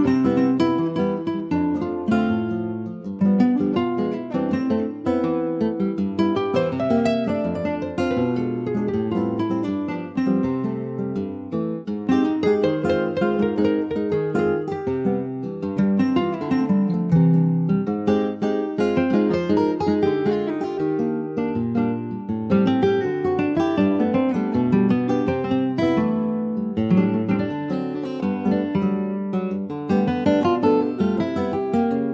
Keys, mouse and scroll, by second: 0.8 shift+click, 1.2 middle click, 1.9 s, 7.8 middle click, 8.3 Tab, 8.7 middle click, 9.1 ctrl+s, 9.3 middle click, 9.7 Tab, 9.9-10.3 scroll up 2, 10.3 shift+middle click, 11.1 3, 11.5 click, 11.8-12.4 scroll up 1, 12.4 2, 12.8 click, 13.7 ctrl+b, 22.6 click, 23.2 click, 23.5 scroll down 3, 23.8-24.9 middle drag, 24.9 ctrl+s, 25.2 middle click, 25.4 Tab, 25.8 middle click, 26.1 click, 26.3 scroll down 2, 26.6 middle click, 26.9 scroll up 2, 27.2 ctrl+s, 27.3 click, 27.6 scroll up 1, 27.8 Tab, 28.0 middle click, 28.3 scroll up 1, 28.6-30.1 middle drag, 30.1-30.6 scroll up 1, 30.8 2, 31.2 click.